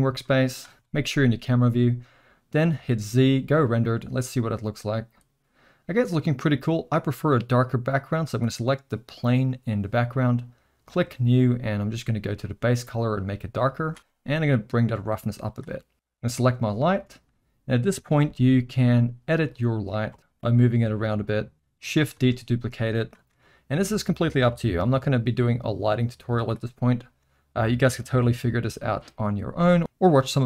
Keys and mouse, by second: 0.4 middle click, 0.7 KP_0, 2.7 z, 8.2 click, 10.9 drag, 12.4 click, 14.6-15.6 drag, 18.2 space, 20.2 space, 20.4 g, 22.1 shift+d, 23.3 r, 24.8 shift+d, 27.2 r, 28.3 g.